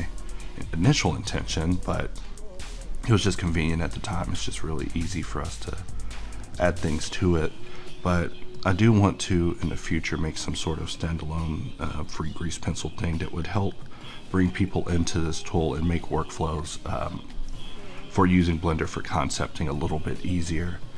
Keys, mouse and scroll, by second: 9.6-20.9 drag.